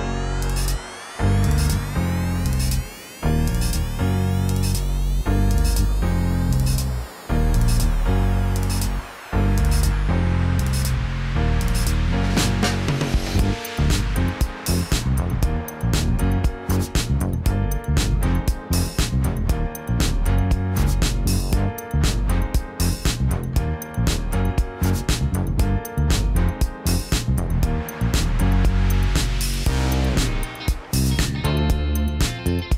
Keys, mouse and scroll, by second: 0.9 Escape, 1.5 g, 2.9 Escape, 5.2 ctrl+t, 10.3 Escape, 12.1 alt+s, 15.1 Escape, 19.7 Tab, 20.2 click, 21.4 KP_1, 21.6 KP_3, 23.1 shift+d, 24.3 r, 24.6 KP_Subtract, 24.9 KP_9, 25.1 KP_0, 26.0 Escape, 26.6 r, 26.9 KP_9, 27.3 KP_0, 27.7 KP_Enter, 29.0 g, 32.2 Tab.